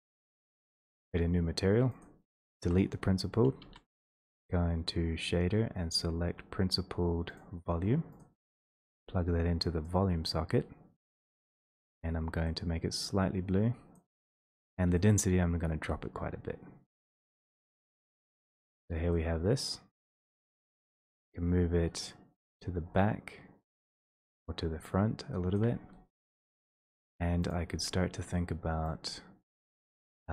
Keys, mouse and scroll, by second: 1.2 click, 2.0 click, 2.6 Delete, 4.5 a, 5.2-5.7 scroll down 3, 5.7 click, 7.1 scroll down 3, 7.3 click, 8.2 click, 8.9 middle click, 9.8 click, 11.2 click, 14.0 click, 18.5 shift+click, 18.9 w, 20.3 click, 20.7 w, 25.8 shift+click, 27.5 click, 30.0 click.